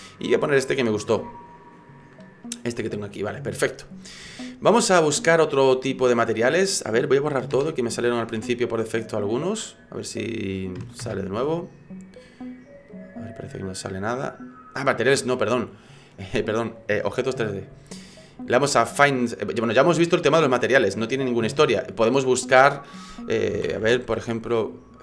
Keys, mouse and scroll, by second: 2.5-3.2 scroll down 4, 4.4 shift+middle click, 6.5 click, 9.5 click, 12.9 click, 15.1 click, 22.0 click, 23.9 e.